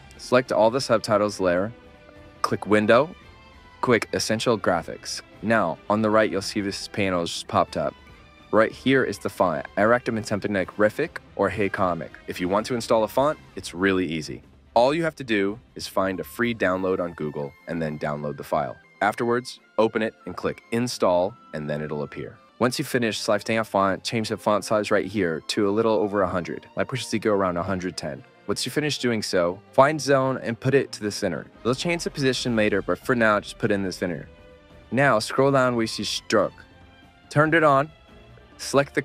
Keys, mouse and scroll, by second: 5.5-7.9 right drag, 5.5 w.